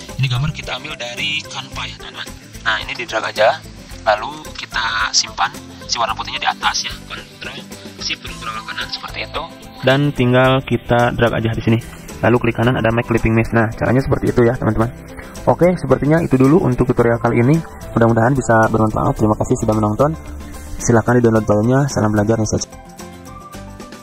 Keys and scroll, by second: 0.4 v, 13.3 z, 15.6 v, 17.5 Delete, 17.9 z, 19.3 v.